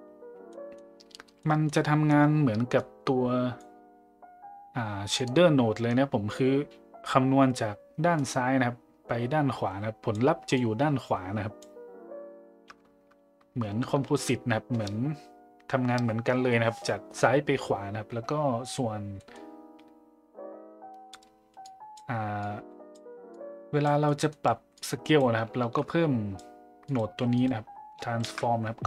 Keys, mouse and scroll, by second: 0.5 middle click, 1.5 middle click, 2.8 click, 8.2-10.1 drag, 10.6-11.6 drag, 19.3 middle click, 21.7 click, 22.4-22.9 drag, 23.4 click, 24.1 middle click, 24.8-25.2 drag, 25.6 shift+a, 27.4 click, 28.2 shift+d.